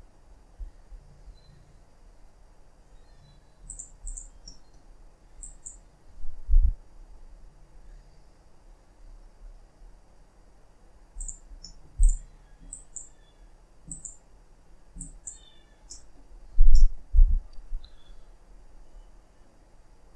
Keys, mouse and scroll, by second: 3.9 click, 4.2 scroll down 2, 4.4 middle click, 4.7-5.3 scroll up 1, 5.3 click, 6.4 g, 11.4 scroll down 2, 11.5 middle click, 11.9 click, 12.6 click, 13.8 click, 14.9 click, 15.8 middle click, 16.2-16.6 scroll up 1, 16.6 middle click, 17.0 g.